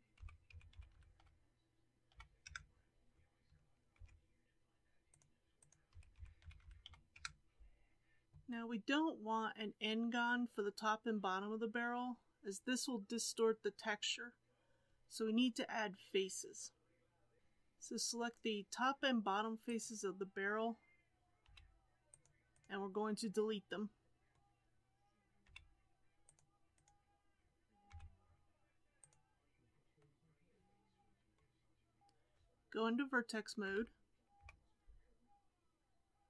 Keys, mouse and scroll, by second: 0.1 s, 3.9 ctrl+r, 5.9 s, 8.2-9.4 middle drag, 17.4 3, 19.6 click, 21.4 c, 23.1-25.4 middle drag, 25.4 c, 27.9 x, 29.9 scroll down 1, 30.1-33.6 middle drag, 33.6 1, 34.3 KP_7, 35.3-36.2 scroll up 2.